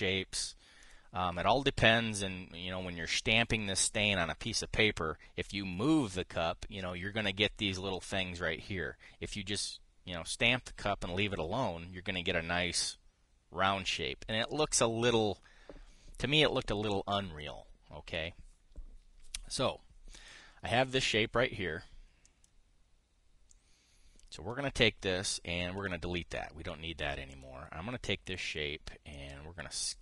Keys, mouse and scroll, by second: 1.5 click, 23.0 click, 24.2 click, 26.5 Delete, 27.0 drag, 28.0 click, 29.8-30.0 ctrl+shift+drag.